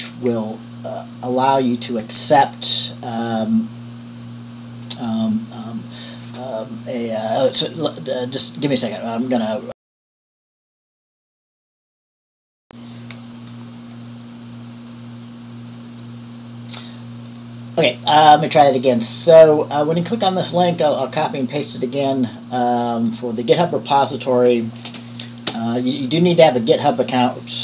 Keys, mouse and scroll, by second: 0.2-1.7 drag, 12.0 click, 12.7 shift+Return, 17.5 click, 20.4 click, 22.2 click, 24.3 click, 25.1 ctrl+v, 25.7 Return.